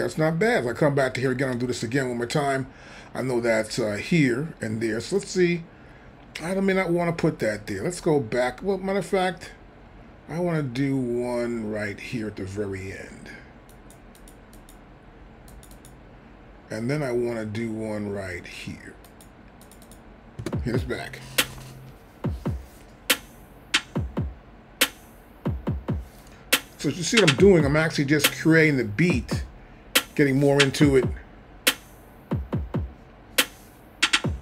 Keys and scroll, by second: 20.4 space.